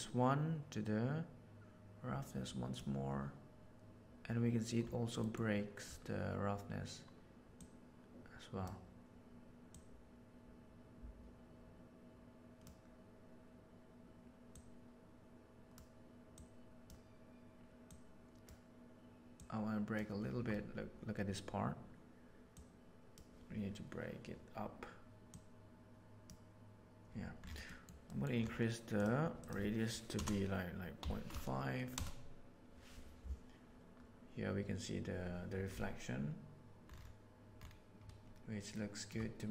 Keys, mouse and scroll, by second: 7.5-8.6 drag, 9.7-10.4 drag, 12.0 click, 14.5-15.7 drag, 16.2-17.0 drag, 17.8 click, 19.3 click, 22.4 click, 25.2 click, 27.6 middle click, 28.1 middle click, 29.0-33.2 drag, 38.6-39.0 shift+middle drag.